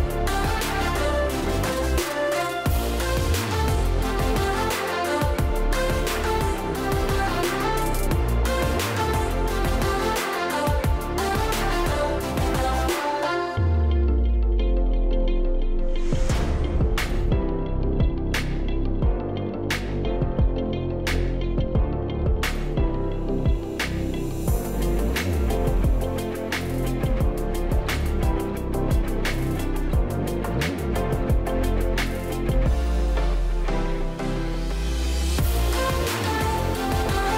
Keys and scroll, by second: 4.8 a, 8.8-9.5 typing, 13.0 Delete, 13.9 space, 23.2-23.9 space, 26.3 space, 26.8 space, 26.9 space, 31.4 space.